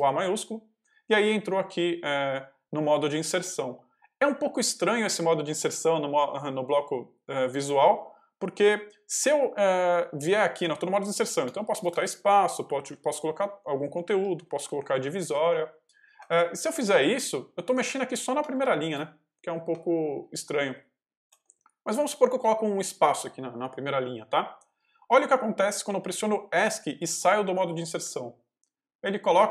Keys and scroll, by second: 11.3-13.3 typing, 14.7 shift+\, 16.1 shift+BackSpace, 18.3 space, 19.2 BackSpace, 22.2 space, 27.9 Escape.